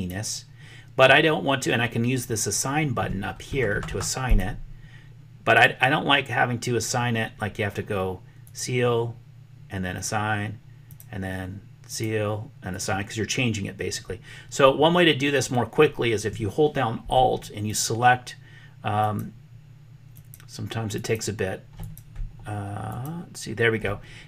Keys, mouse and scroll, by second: 4.3 click, 8.4 click, 9.8 click, 11.9 click, 12.8-17.1 drag, 17.5 alt+click, 19.0 alt+click, 20.0 alt+click, 21.0 alt+click, 21.8 click, 22.9 alt+click.